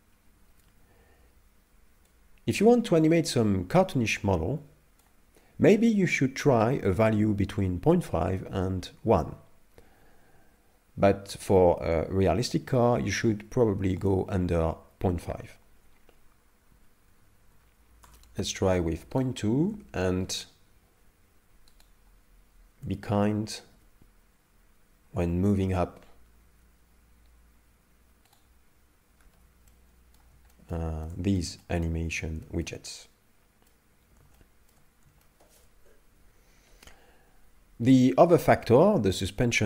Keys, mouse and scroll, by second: 2.1 click, 8.4 middle click, 14.0 click, 19.3 right click, 20.3 shift+right click, 21.9 shift+right click, 23.7 g, 29.3 alt+g, 29.7 middle click, 31.1 middle click, 31.6 shift+middle click, 32.4 shift+middle click, 32.9 middle click, 34.4 shift+middle click, 35.2 shift+middle click.